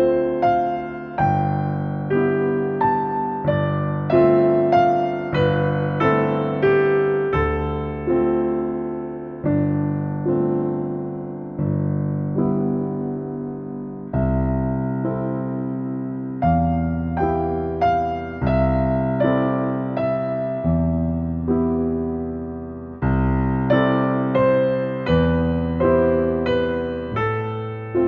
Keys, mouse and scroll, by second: 0.6 click, 1.2 click, 2.6-4.0 typing, 4.3 Return, 6.0 middle click, 7.0-7.8 scroll up 1, 7.8 middle click, 9.0 shift+middle click, 10.3 click, 11.9 click, 13.1 click, 14.4 click, 15.2-15.7 scroll up 1, 15.7 click, 16.6-18.8 scroll down 1, 18.8 click, 21.9 click, 23.0 space, 24.4 click, 26.0 click, 27.9 click.